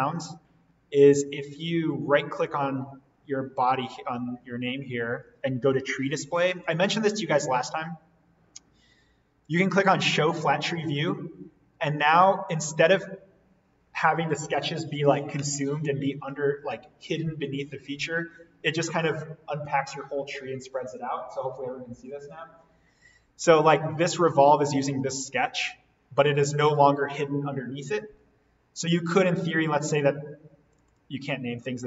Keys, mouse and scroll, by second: 2.4 right click, 9.9 click, 24.1 click, 30.6 click.